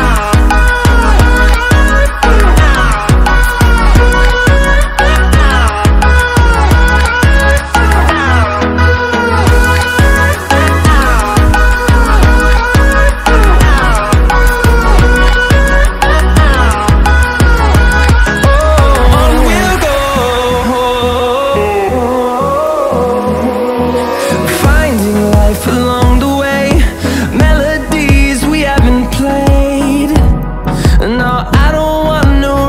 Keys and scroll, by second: 4.0 ctrl+t, 26.4-27.2 typing.